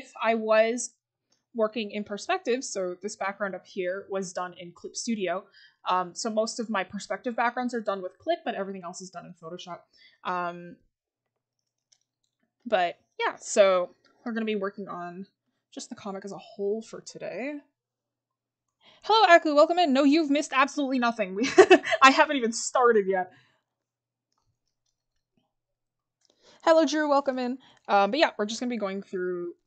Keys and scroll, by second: 2.0 scroll up 1.